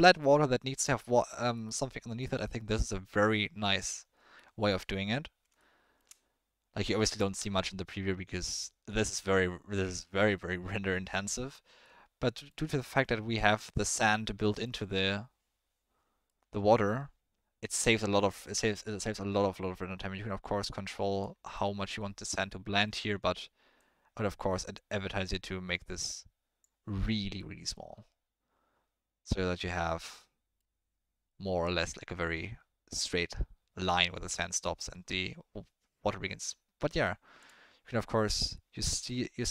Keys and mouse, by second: 1.5-2.2 middle drag, 4.4-4.7 middle drag, 5.6-6.0 shift+middle drag, 11.8-12.5 middle drag, 14.0-14.7 middle drag, 16.3-16.9 middle drag, 17.7 middle click, 18.2 middle click, 19.3-21.3 drag, 21.5-22.8 middle drag, 23.7-26.6 drag, 27.3-27.7 middle drag, 30.1-30.6 drag, 36.4-37.0 drag, 37.4 click.